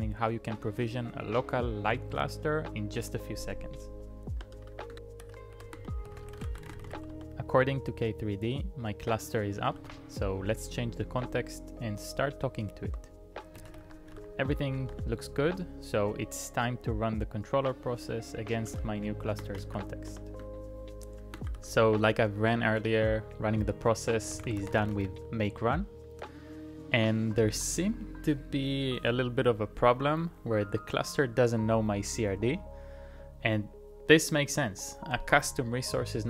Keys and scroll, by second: 4.3 Return, 4.3-7.5 typing, 9.6-11.1 typing, 13.3-14.6 typing, 14.9 Return, 18.5-21.9 typing, 24.1-25.7 typing.